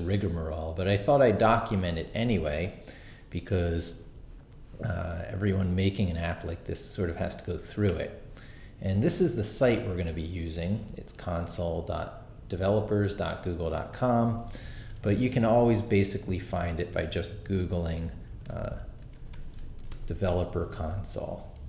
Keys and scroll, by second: 14.8 super+t, 18.5-21.6 typing.